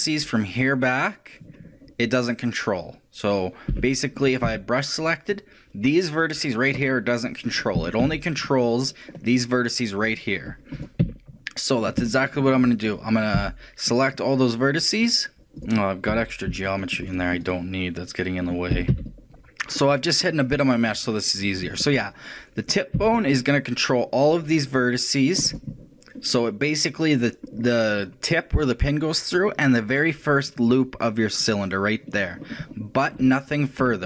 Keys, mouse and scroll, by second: 3.7 b, 4.3 right click, 4.5 c, 7.9 a, 11.0 a, 11.6 middle click, 13.4 c, 15.7-19.2 right drag, 16.2 a, 18.8 a, 19.0 c, 19.4 ctrl+l, 19.4 x, 19.6 middle click, 20.3 middle click, 20.8-22.6 middle drag, 22.6 right click, 23.0 c, 25.6 right click, 27.4-29.4 middle drag, 33.2-34.0 shift+middle drag.